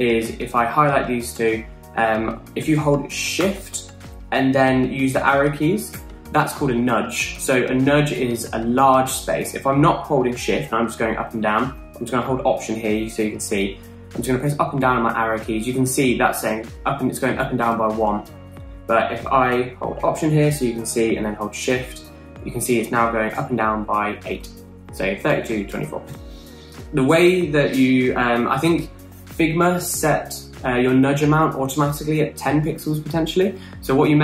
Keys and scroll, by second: 6.2 shift+Down, 14.4 alt+Up, 14.7 alt+Down, 15.1 alt+Up, 15.7 alt+Down, 16.2 alt+Up, 16.6 alt+Down, 17.0 alt+Up, 17.3 alt+Down, 23.6 alt+shift+Up, 24.7 alt+shift+Down, 25.6 alt+shift+Up.